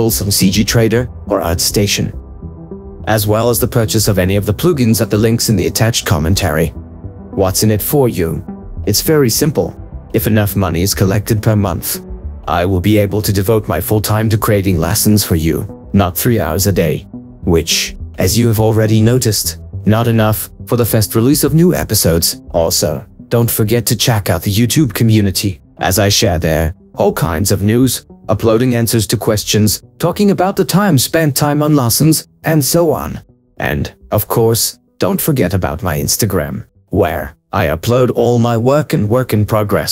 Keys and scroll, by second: 23.7 ctrl+4, 24.4 ctrl+2.